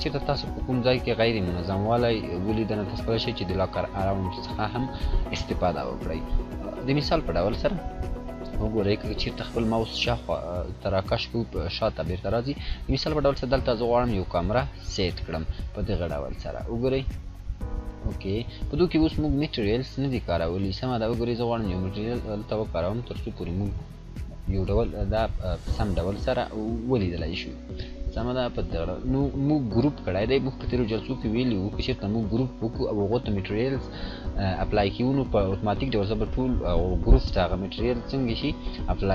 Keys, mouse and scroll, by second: 16.1-17.7 drag, 26.9 scroll down 1, 28.3 click, 30.9 scroll down 1, 38.7 scroll up 1, 38.8-39.1 scroll down 1.